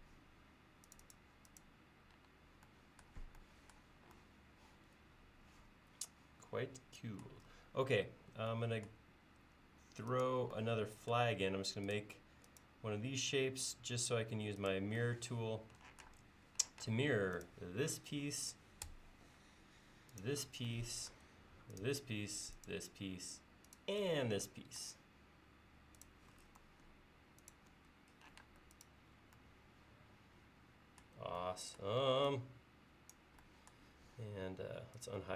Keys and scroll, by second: 8.1 l, 16.9 space, 28.5 space, 32.1 e.